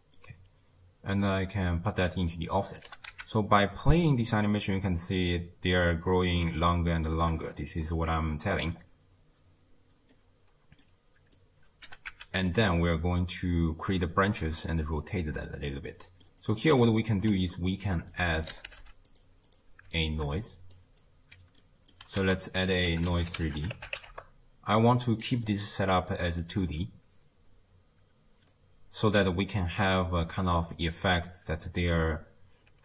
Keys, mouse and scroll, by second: 1.2 drag, 2.3 click, 2.9 g, 3.9-4.5 scroll down 3, 4.5 space, 5.1 space, 5.4-7.1 scroll down 6, 7.1 shift+space, 8.2-8.8 scroll up 2, 8.8 scroll up 1, 9.4-10.1 scroll up 1, 10.1-11.4 middle drag, 11.4 click, 11.9 g, 16.0 middle click, 16.4 click, 18.1 drag, 18.8 d, 19.9 alt+click, 21.0 click, 21.6 middle click, 22.2 ctrl+a, 25.6 middle click, 26.1 click, 28.5 drag, 32.7-32.8 typing.